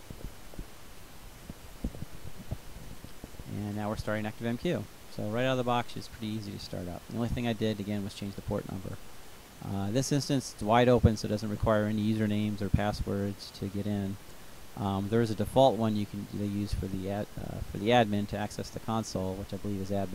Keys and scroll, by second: 0.0-1.2 typing, 2.4 Return.